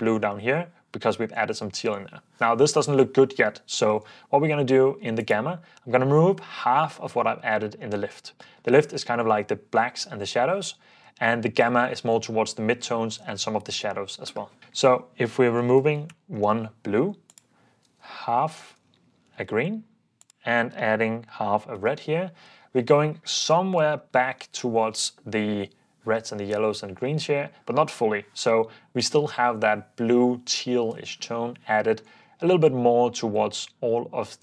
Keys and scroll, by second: 15.7-16.9 typing, 17.9-21.8 typing, 23.4 super+d, 24.0 super+d, 25.9 super+d.